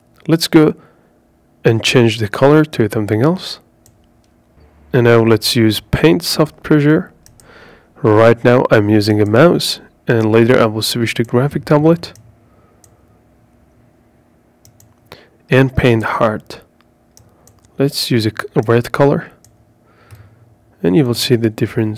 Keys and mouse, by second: 3.7-9.3 drag, 16.3-19.3 drag.